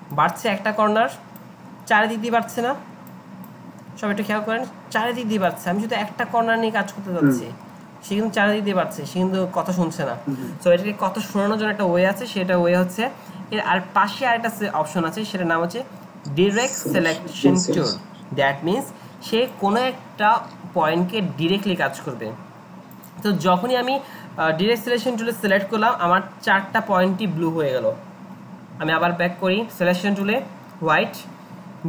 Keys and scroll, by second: 2.5 ctrl+z, 5.8 ctrl+z, 7.7 ctrl+z.